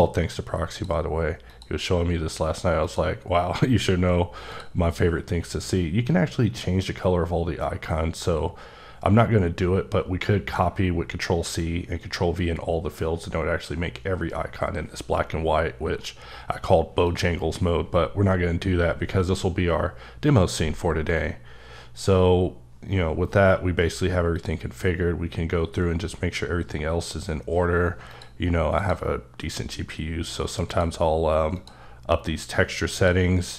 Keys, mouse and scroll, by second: 0.7 click, 1.5 click, 2.8 click, 3.3-3.7 scroll down 3, 3.7-4.1 scroll up 1, 4.5 click, 5.1-7.3 scroll down 3, 15.4-17.0 scroll up 9, 17.0 click, 18.5-19.2 scroll down 6, 20.3-23.4 scroll down 6, 23.4 scroll down 2, 25.4 click, 28.1 click, 28.7 click, 30.6 click, 31.5 click, 32.9 click.